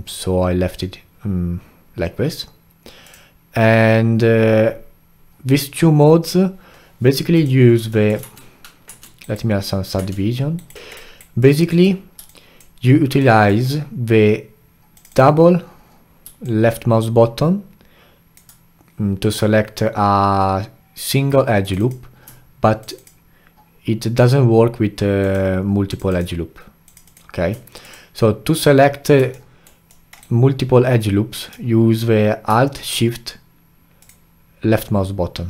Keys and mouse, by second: 7.3 click, 7.9 alt+middle click, 8.3 Tab, 8.9 Tab, 9.2-10.0 right drag, 10.0 Tab, 10.6 alt+right click, 10.7 alt+middle click, 10.9-11.4 alt+right drag, 11.4-13.2 alt+drag, 13.2-14.9 alt+middle drag, 14.9 click, 15.1 click, 16.4-19.4 alt+drag, 21.6 click, 21.8 click, 22.8 shift+click, 23.0 shift+click, 25.2 shift+click, 25.9 shift+click, 26.1 shift+click, 26.8 shift+click, 27.0 shift+click, 27.8 click, 29.3-30.2 alt+middle drag, 30.2-33.2 alt+right drag, 34.0 alt+shift+click.